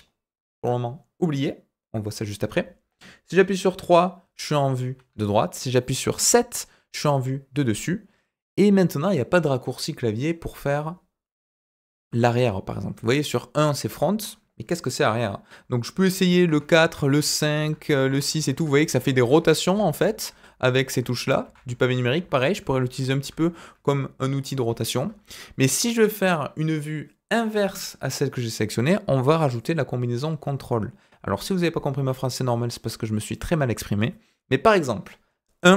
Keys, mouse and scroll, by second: 3.6 KP_3, 6.2 KP_7, 12.9 KP_1, 16.4-23.2 typing, 25.0 KP_1.